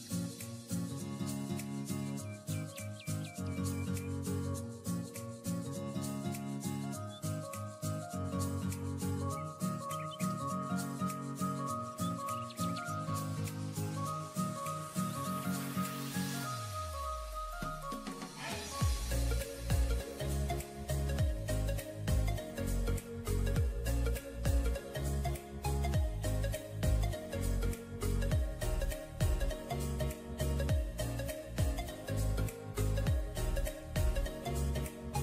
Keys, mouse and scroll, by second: 2.4 double click, 4.5 double click, 7.7 double click, 11.8 alt+scroll down 1, 13.0-13.5 alt+scroll down 1, 14.0-14.5 alt+scroll up 1, 14.7 alt+scroll down 1, 15.6-16.0 alt+scroll up 1, 16.4-16.8 alt+scroll up 1, 17.4-18.1 alt+scroll up 3, 18.2 alt+scroll down 5, 20.7-21.5 typing, 23.9-24.8 typing, 29.7 alt+scroll up 1, 30.5-31.0 typing, 32.6 typing.